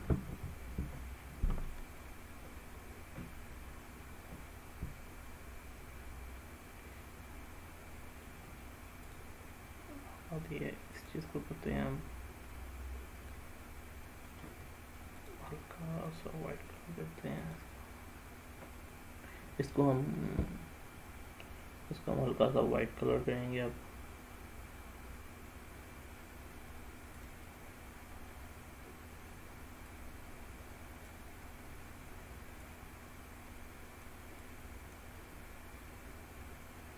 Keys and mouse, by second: 6.3-8.4 middle drag, 11.0 click, 12.6-14.4 middle drag, 15.4-25.7 drag, 27.2 click.